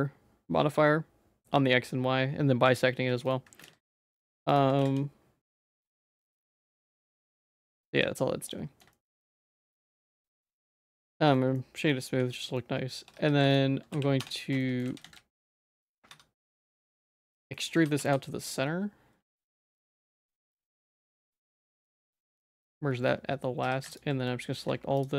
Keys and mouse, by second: 3.2 middle click, 3.6 alt+x, 4.8 alt+x, 6.3 ctrl+s, 6.8 g, 7.9 ctrl+s, 8.5 middle click, 8.9 shift+middle click, 9.2 middle click, 10.0 right click, 10.7 middle click, 11.2 shift+middle click, 11.5 middle click, 12.2 ctrl+s, 12.6 middle click, 13.0 Tab, 13.1 2, 13.9 f, 14.2 Tab, 14.6 shift+middle click, 14.9 ctrl+z, 15.0 ctrl+z, 15.1 middle click, 15.8 middle click, 16.1 1, 16.7 shift+middle click, 17.5 middle click, 17.7 e, 20.0 e, 22.6 middle click, 23.6 2, 24.2 middle click.